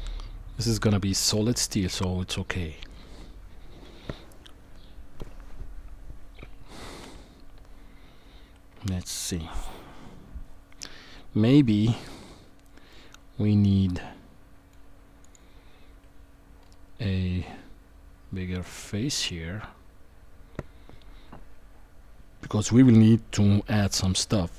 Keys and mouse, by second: 8.7 KP_1, 12.9-14.7 middle drag, 15.2 click.